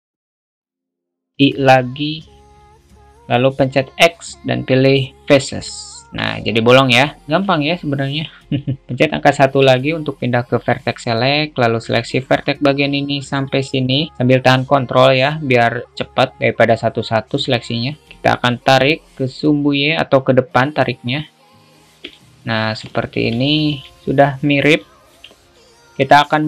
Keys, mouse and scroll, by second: 1.8 i, 4.0 x, 6.2 Tab, 7.3 alt+shift+middle click, 9.8 1, 18.4 alt+middle click, 19.2-22.2 drag, 22.4 alt+middle click, 23.7 middle click, 24.0 Tab, 24.6 click.